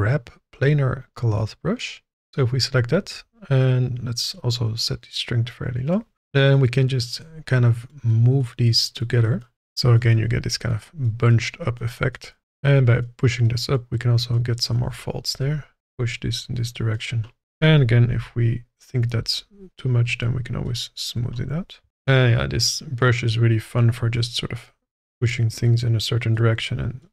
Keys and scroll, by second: 18.0 f, 21.9 ctrl+z.